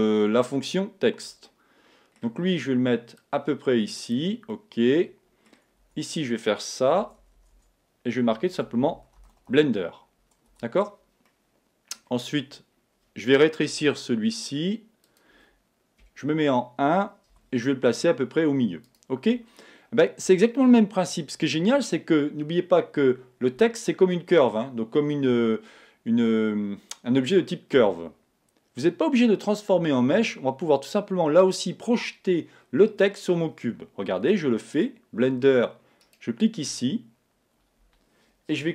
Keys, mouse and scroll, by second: 1.5-3.3 middle drag, 3.2 click, 4.5-6.4 middle drag, 5.8 Tab, 7.0 BackSpace, 7.4 BackSpace, 8.6-9.2 typing, 10.5 Tab, 11.3-14.7 middle drag, 15.2 click, 16.0 KP_1, 17.3 g, 19.0 click, 37.6 right click.